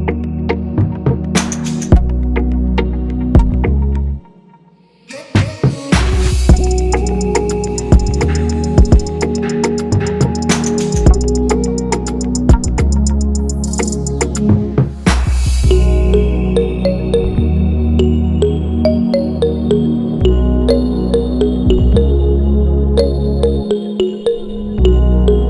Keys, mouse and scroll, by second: 4.9 Return, 7.5-8.3 typing.